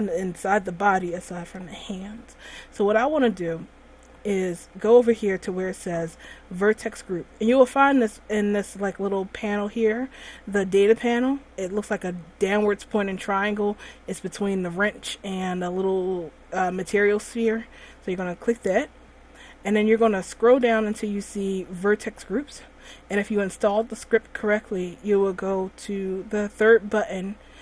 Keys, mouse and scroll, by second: 11.0 click, 18.7 click, 19.9-20.4 scroll up 3, 20.4-20.9 scroll down 1, 20.9-21.9 scroll down 2.